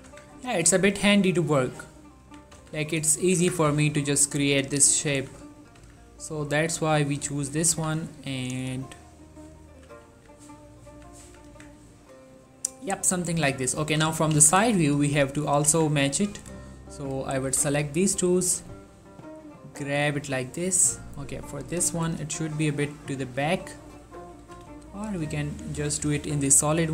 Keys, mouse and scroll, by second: 0.0 z, 0.2 Tab, 0.5 scroll down 1, 1.0-2.2 middle drag, 2.3 1, 2.7 z, 3.0 scroll up 2, 3.2 shift+middle click, 3.5 Tab, 3.8 z, 5.2 s, 5.7 click, 5.9 z, 6.4 click, 7.0 s, 7.5 right click, 7.8 z, 8.3 s, 9.2 click, 9.8 g, 10.2 z, 10.9 click, 11.0 z, 11.4 z, 11.6 Tab, 11.9 scroll down 1, 12.2-13.9 middle drag, 13.9 3, 14.5 z, 14.8 shift+middle click, 15.2 ctrl+middle click, 15.8 Tab, 16.4-17.6 drag, 17.6 s, 18.2 y, 20.1-22.0 drag, 22.0 g, 22.3 y, 23.1 click, 23.3 z, 24.5 g, 24.8 y, 25.5 click, 25.9 s, 26.2 y.